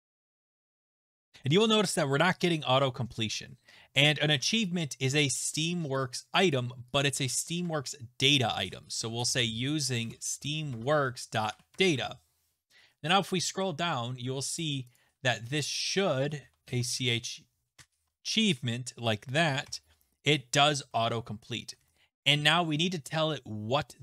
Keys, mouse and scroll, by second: 0.0-1.5 typing, 3.9-4.5 scroll, 4.4 a, 6.5 click, 7.0 click, 7.6 Return, 8.3-12.7 typing, 9.2 middle click, 13.0-13.9 scroll, 13.9-14.6 scroll, 14.6 click, 15.0 click, 15.6 click, 15.7 click, 16.2-17.3 typing, 17.8 Tab, 19.4-20.1 typing, 21.5-22.3 typing.